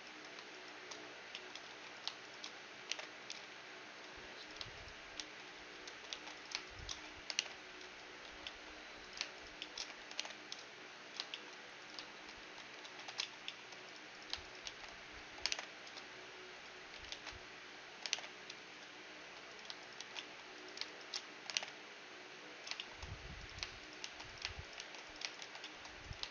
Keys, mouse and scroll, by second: 0.5-8.7 right drag, 1.4-3.4 middle drag, 1.7 a, 2.9 alt+m, 5.2 shift+r, 5.9 ctrl+z, 6.2 ctrl+z, 7.4 alt+m, 8.3 a, 8.5-16.4 middle drag, 9.1-11.2 right drag, 10.2 alt+m, 11.8-13.7 right drag, 12.5 a, 12.9 ctrl+z, 13.9-15.5 drag, 14.7 shift+r, 15.5 alt+m, 17.2 ctrl+z, 18.2 alt+m, 19.2 a, 19.5-22.8 right drag, 20.0 shift+r, 20.2-22.2 middle drag, 21.6 alt+m, 23.1-25.0 middle drag, 23.5-26.3 right drag, 24.0 shift+r, 24.8 shift+r, 25.4 shift+r, 25.7-26.3 middle drag.